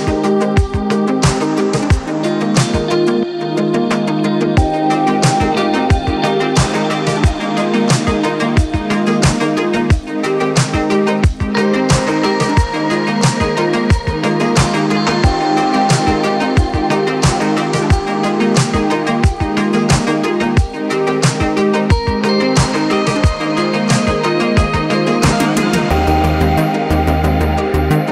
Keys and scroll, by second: 2.2 m, 6.4 p, 10.8 Escape.